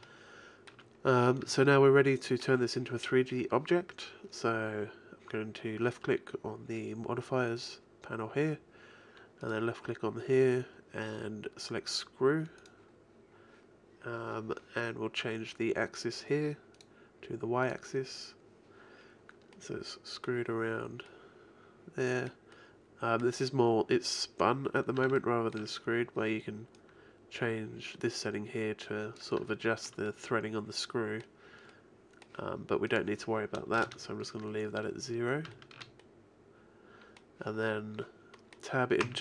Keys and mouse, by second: 1.2-3.7 shift+middle drag, 7.6-11.7 middle drag, 16.8-19.5 drag, 19.5-25.0 middle drag, 25.2-26.8 shift+middle drag, 29.7-31.7 middle drag, 35.6-38.1 middle drag, 38.4 middle click, 39.1 Tab.